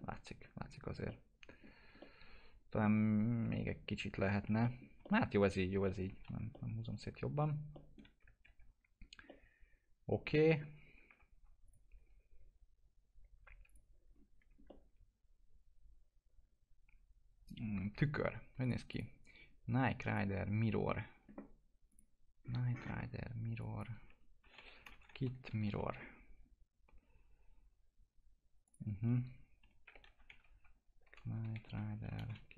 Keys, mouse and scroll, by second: 0.6-0.9 scroll up 1, 1.0 alt+middle click, 1.7 scroll down 1, 1.9-4.2 alt+middle drag, 4.2 scroll up 1, 4.4 F4, 4.6 middle click, 5.0 alt+middle click, 5.6 scroll down 1, 5.8 middle click, 6.0 F4, 6.5 alt+middle click, 8.4 ctrl+s, 9.2-11.1 alt+middle drag, 11.1 F4, 11.6 click, 12.0 scroll up 1, 13.6 click, 14.1 scroll down 1, 14.6-18.6 alt+middle drag, 18.6 click, 22.4-23.5 scroll up 1, 23.5 click, 24.4 k, 24.8 space, 25.0 m, 25.6 Return, 28.6 click, 29.6-30.0 typing, 31.2-32.1 typing.